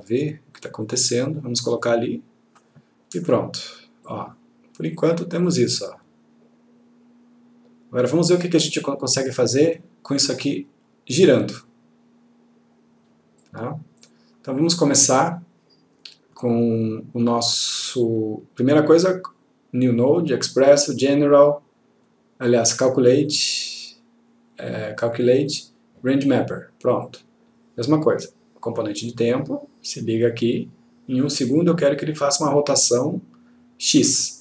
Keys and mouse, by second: 13.5 click, 19.1 right click, 26.2 click, 29.2-30.8 click.